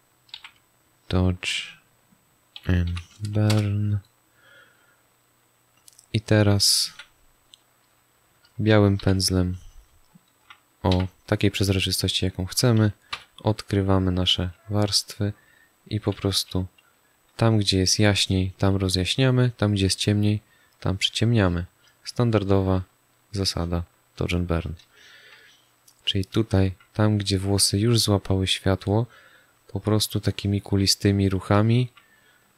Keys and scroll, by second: 0.3 shift+d, 2.5 shift+7, 3.4 Return, 6.8 z, 7.9 space, 8.9 b, 10.8 x, 13.0 3, 15.8 ctrl+alt+z, 16.3 2, 19.7 1, 24.8 space, 31.5 space.